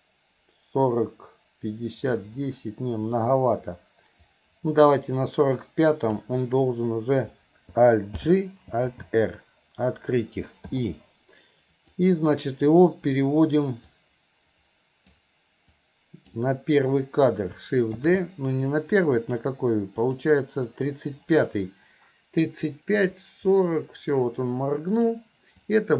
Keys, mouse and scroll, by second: 2.2-6.3 drag, 10.8 i, 11.9-12.7 drag, 14.1-15.3 drag, 15.8-16.4 drag, 20.1 shift+click, 22.8-25.2 drag, 25.6-25.9 drag.